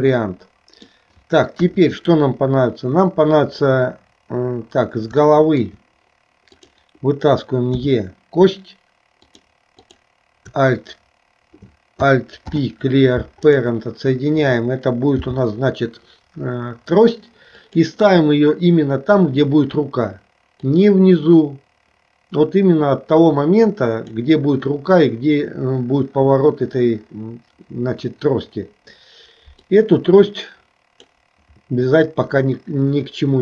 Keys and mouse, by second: 1.7 KP_1, 5.3 shift+middle click, 7.9 e, 9.9 click, 12.5 alt+p, 15.3 g, 20.7-24.2 drag, 29.7-31.1 drag.